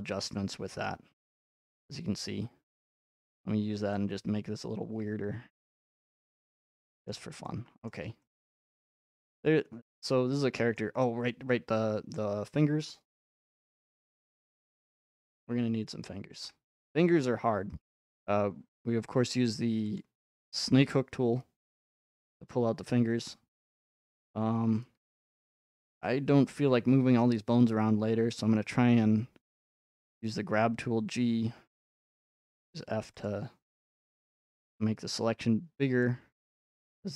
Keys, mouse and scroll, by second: 1.4 click, 3.2 scroll, 6.1 click, 7.1 scroll, 7.7-10.7 shift+middle drag, 13.7 click, 15.2 middle click, 15.3 middle click, 15.4 middle click, 16.4 shift+middle click, 16.8 middle click, 16.9 middle click, 18.9 scroll, 20.0 click, 25.4 scroll, 30.1 g, 32.1 f, 33.2 click, 36.0 click.